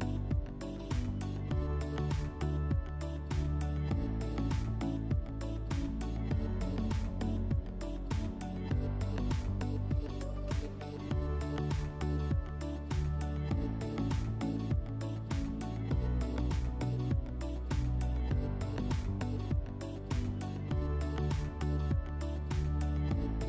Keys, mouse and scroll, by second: 6.6 click, 20.7-22.3 drag.